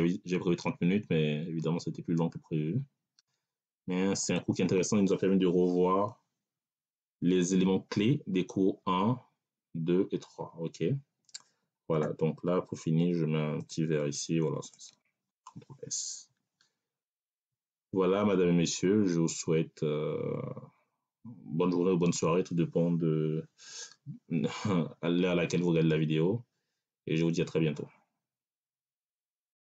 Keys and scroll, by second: 16.9 ctrl+s.